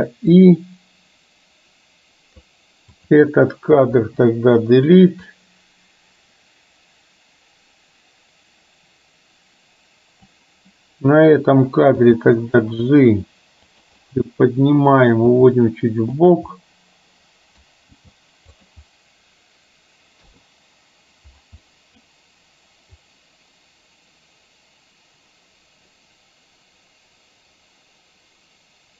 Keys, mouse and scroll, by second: 0.5-2.6 drag, 3.0 click, 4.0 Delete, 5.4-10.5 drag, 12.1 g, 14.1 scroll up 1, 14.2-15.2 middle drag, 15.2 scroll down 1, 15.4 g, 16.6-17.7 middle drag, 16.6 scroll up 1, 18.0 g, 20.4 i, 21.7 middle drag, 23.1-28.9 drag.